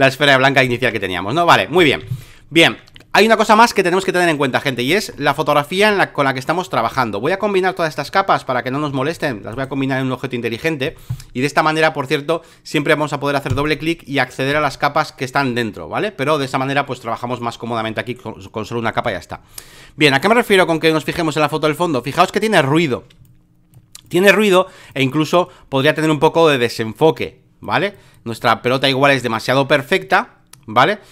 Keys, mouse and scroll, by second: 0.0 alt+click, 0.7 alt+click, 1.8 ctrl+click, 2.0 v, 4.6 alt+middle click, 4.9 alt+middle click, 5.2 alt+middle click, 5.4 alt+middle click, 5.8 space, 5.9 click, 8.1 click, 9.1 shift+click, 9.5-13.0 drag, 13.5-18.5 drag, 20.5 space, 20.6 click, 21.7 click, 23.2 click, 24.0 click, 24.9 click, 27.2 click, 27.9 click, 28.4 click, 29.1 click, 29.7-31.1 drag.